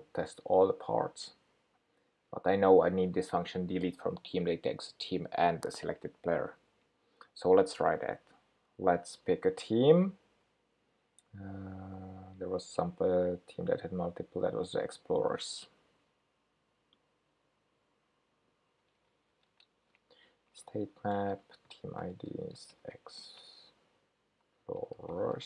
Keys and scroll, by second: 19.0 super+x, 21.4 super+v.